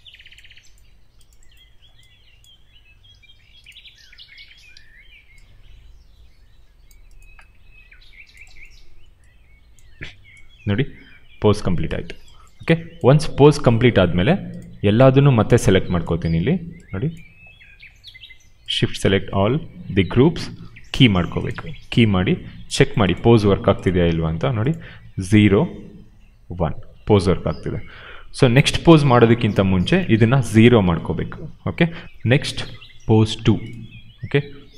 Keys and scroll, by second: 4.7 ctrl+z, 30.2 0, 30.4 Return.